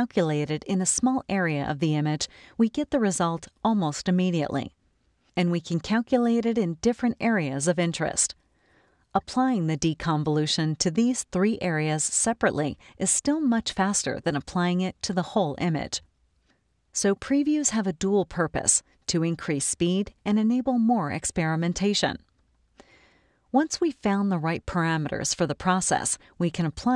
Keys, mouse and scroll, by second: 8.2 click, 10.6 click, 15.9 click, 18.1 click, 26.7 click.